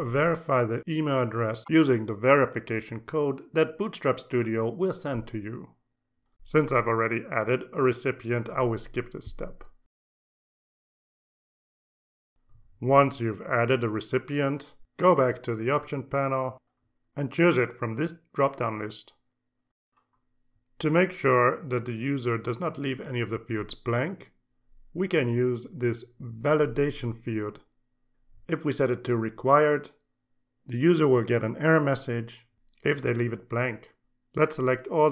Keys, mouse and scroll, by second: 10.1 click, 11.9 click, 17.5 click, 18.9 click, 21.7 click, 26.9-34.7 drag.